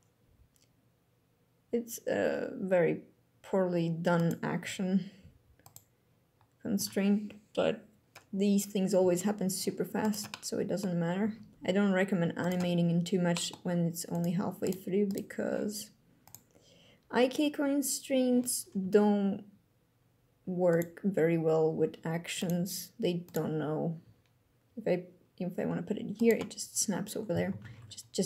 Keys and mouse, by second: 3.9 click, 4.3 g, 5.3 click, 8.7 g, 9.7 click, 10.0 click, 10.9 g, 12.1 click, 13.1 click, 13.3 g, 13.8 click, 15.9 click, 18.5 g, 20.4 click, 21.5 g, 22.1 click, 22.3 g, 23.0 click, 23.7 g, 25.9 click, 27.0 a, 27.3 alt+g, 27.4 alt+r.